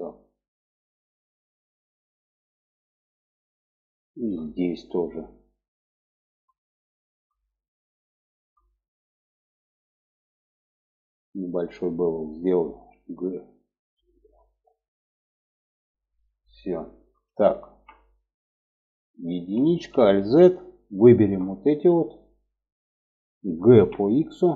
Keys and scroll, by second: 12.1 g, 14.2 g, 18.7 1, 19.3 alt+z, 23.1 g.